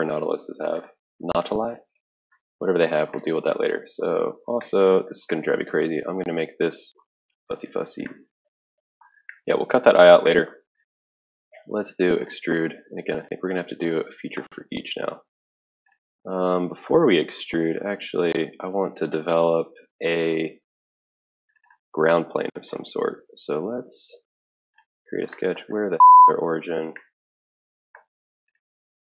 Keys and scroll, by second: 13.2 typing.